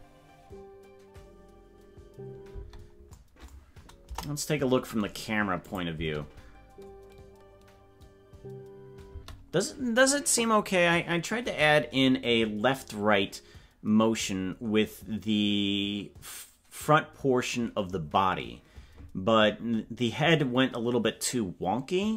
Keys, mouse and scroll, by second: 2.6 space, 4.0 KP_0, 5.7 click, 5.9 space.